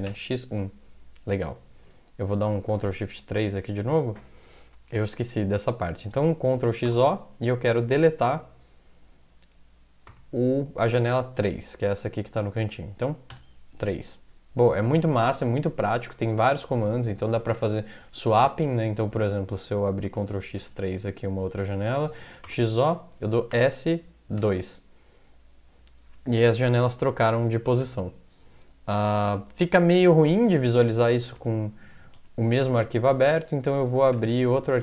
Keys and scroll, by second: 0.1 1, 2.7 ctrl+x, 3.1 3, 6.6 ctrl+x, 6.9 o, 10.1 x, 13.3 3, 15.0 alt+Tab, 18.2 alt+Tab, 20.1 ctrl+x, 20.6 3, 22.2 ctrl+x, 22.4-24.4 typing, 31.1 ctrl+x, 31.4 0, 31.9 ctrl+x, 32.1 0, 34.1 ctrl+\, 34.7 Up.